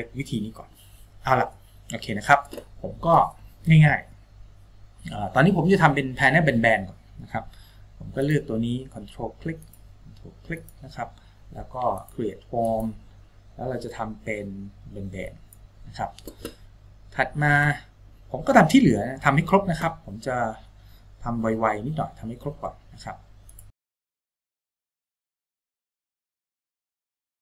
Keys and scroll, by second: 24.3 Tab, 25.2 Tab.